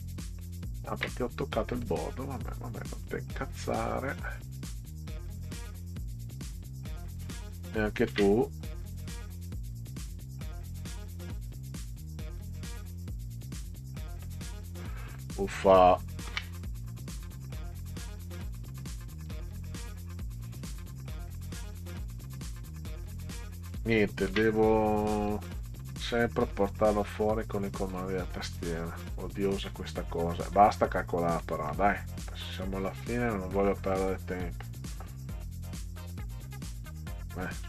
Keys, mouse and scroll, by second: 0.6 ctrl+scroll up 2, 1.8 click, 3.0 middle click, 4.5-6.3 drag, 8.1 ctrl+z, 9.5 click, 10.4 click, 11.9 click, 13.6-14.6 drag, 16.3 ctrl+z, 17.4 click, 18.8 click, 19.3 click, 21.9 click, 24.3 ctrl+x, 25.3 click, 27.1-28.0 drag, 31.4 middle click, 32.2 click, 34.6 Down, 35.7 Down, 35.9 Down, 36.0 Down, 36.1 Down, 36.6 Down.